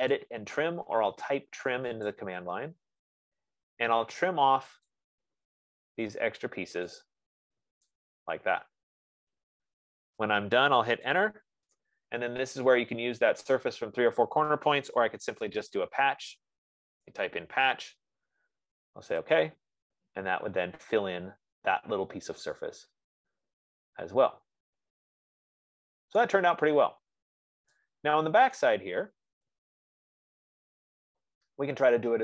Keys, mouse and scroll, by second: 0.5 click, 2.6 click, 5.4 click, 7.3 click, 10.6 right click, 11.4 Return, 15.4-16.5 typing, 17.4 Return, 19.9 click, 21.0-21.6 scroll, 24.9 scroll, 26.5 right click, 27.0 middle click, 27.1 middle click, 29.0-30.0 scroll, 29.2 right click, 30.0-30.6 scroll, 30.8-32.0 scroll.